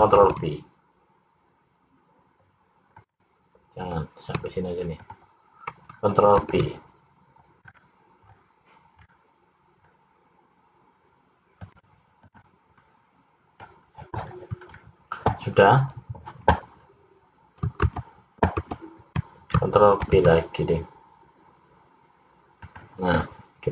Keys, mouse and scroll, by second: 0.3 ctrl+b, 4.9 shift+click, 6.5 ctrl+b, 12.4 click, 13.0 middle click, 14.8-15.3 scroll up 2, 18.0 ctrl+z, 18.8 ctrl+z, 20.2 ctrl+b.